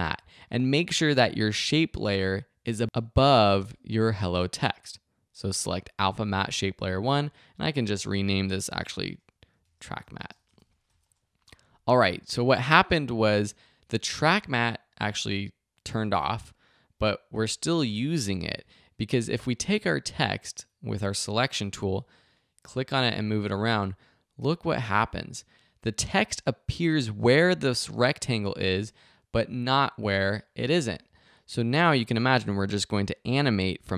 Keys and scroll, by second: 8.1 Return, 8.8 shift+Return, 8.8-11.4 typing.